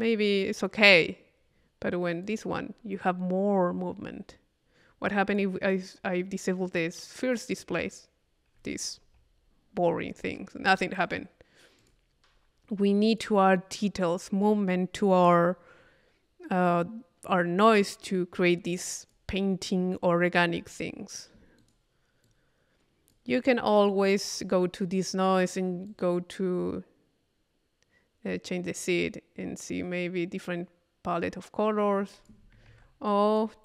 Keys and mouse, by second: 2.3 click, 5.1 click, 6.0 click, 7.8 click, 11.0 click, 11.8 click, 13.1 click, 14.4 click, 18.9 click, 19.7 click, 21.6 click, 22.3-23.4 drag, 23.8-24.8 drag, 25.9-32.7 drag, 33.1 click.